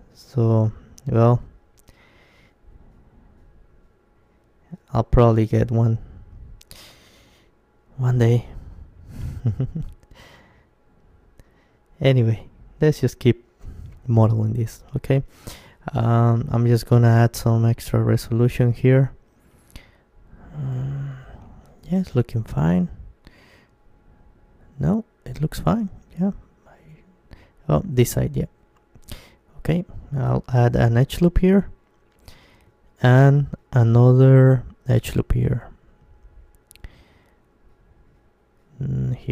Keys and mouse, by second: 0.2 g, 2.9-5.0 drag, 3.3-5.2 right drag, 4.3 g, 4.8 middle click, 6.8-9.1 drag, 7.1-10.2 middle drag, 7.1-9.4 right drag, 11.0 Tab, 12.8-22.4 middle drag, 22.6-28.0 middle drag, 28.0 Tab, 28.8 middle click, 29.7 ctrl+r, 31.9-33.9 drag, 32.7 Tab, 33.9 Tab, 33.9 middle click, 34.8-36.4 middle drag, 35.5 ctrl+r, 39.2-39.3 drag.